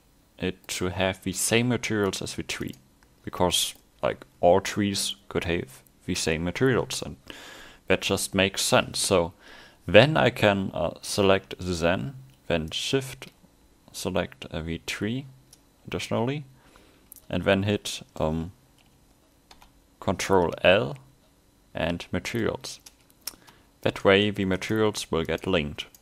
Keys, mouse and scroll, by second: 0.0 middle click, 2.2 right click, 3.4 middle click, 12.7 shift+right click, 23.8 right click.